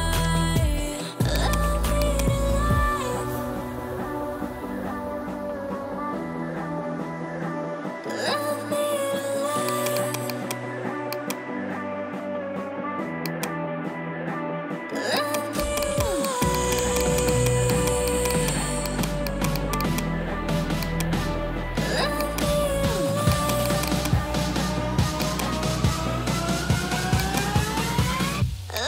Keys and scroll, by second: 12.5 [, 25.4 ].